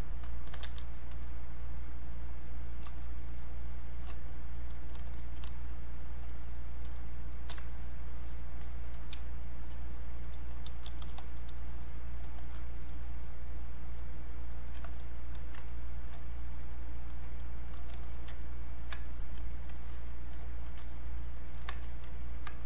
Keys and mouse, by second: 0.2-1.0 typing, 1.3 click, 5.2 alt+click, 7.0 space, 7.3 click, 7.5 space, 7.8 shift+click, 9.1 space, 9.6 click, 9.7 space, 10.5 click, 11.1 r, 11.6 click, 12.4 alt+click, 14.1 alt+click, 15.7 ctrl+right click, 17.1 click, 18.4 ctrl+right click, 19.2 alt+click, 19.8 alt+click, 22.2 ctrl+right click.